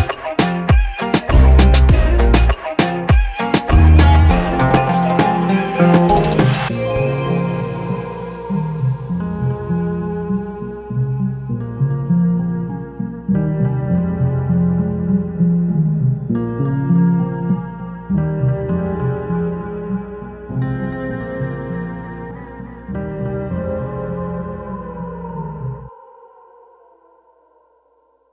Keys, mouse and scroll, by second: 0.6 alt+middle click, 4.7 click, 6.5-8.6 drag, 9.1 click, 11.4-14.5 shift+right drag, 15.3 shift+click.